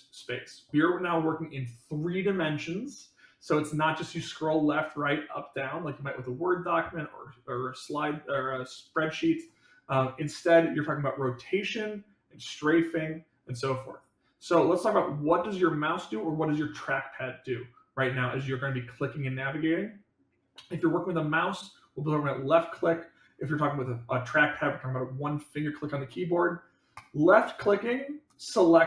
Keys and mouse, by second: 27.0-27.8 drag.